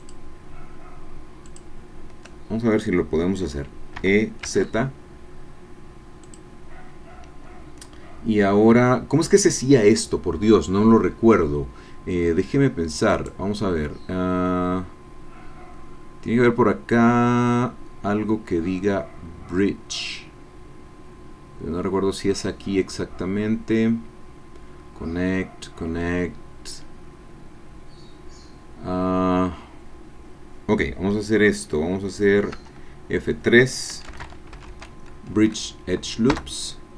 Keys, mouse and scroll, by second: 0.3 shift+click, 1.7 shift+click, 4.2 e, 4.4 z, 6.2-12.2 drag, 13.1 right click, 32.6 F3, 34.1 b, 34.2 r, 34.5 i, 34.7 d, 36.4 Return.